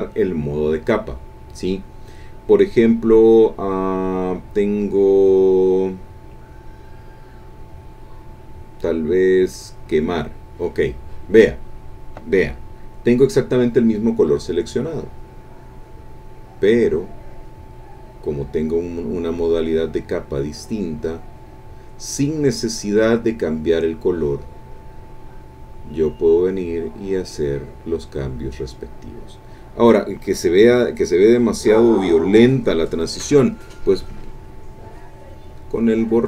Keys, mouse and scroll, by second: 0.0 click, 9.8 click, 14.7-28.9 drag, 33.3 e, 34.0-36.2 drag.